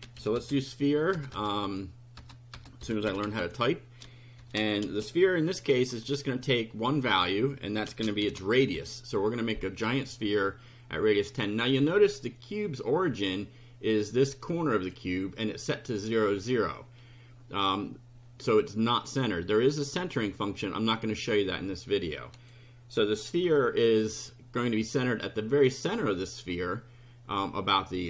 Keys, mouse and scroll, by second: 0.0-4.9 typing, 6.7-8.7 typing, 19.0 click, 22.4 click, 23.4 F5.